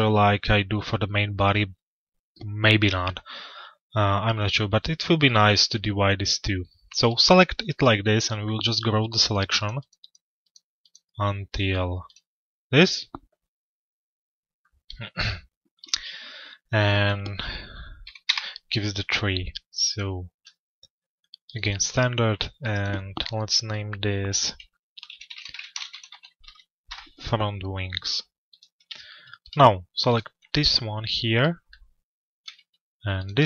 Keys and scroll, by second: 17.8 Return, 26.4 Return.